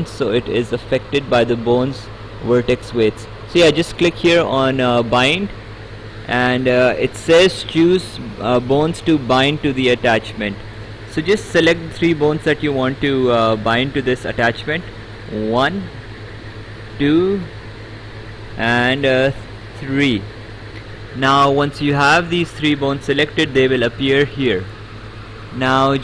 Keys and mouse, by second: 5.0 click, 15.2 click, 16.7 click, 18.9 click.